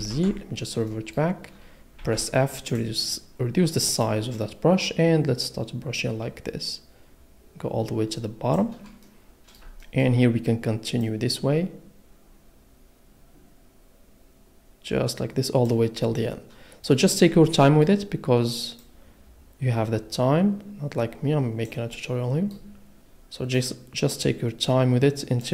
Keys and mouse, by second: 0.4 ctrl+z, 0.9 click, 2.0 f, 2.7 click, 4.0 click, 11.1 click, 18.8 click, 23.5 click.